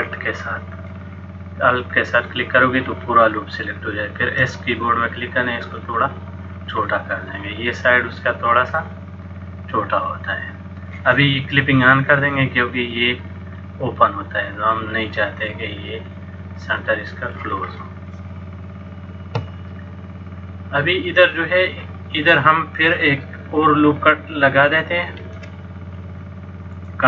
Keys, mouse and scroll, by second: 4.3 s, 6.9 middle click, 8.8 click, 13.3 click, 17.8 middle click, 21.8 click, 25.4 ctrl+r.